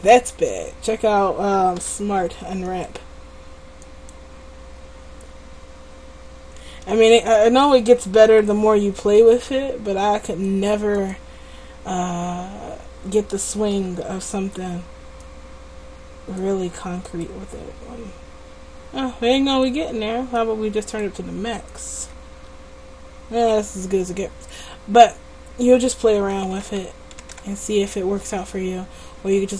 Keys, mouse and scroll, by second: 0.3 Tab, 0.7 Tab, 1.8 u, 13.8 u, 18.9 u, 26.4 ctrl+z, 26.7 ctrl+z, 26.9 ctrl+z, 27.3 ctrl+z, 27.4 ctrl+z.